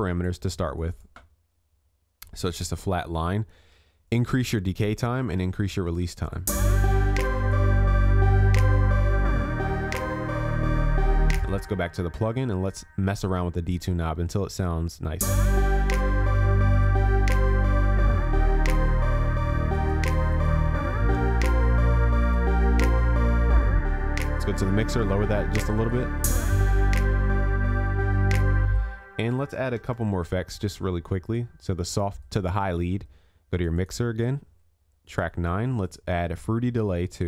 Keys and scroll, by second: 21.2 ctrl+s, 29.8 ctrl+s.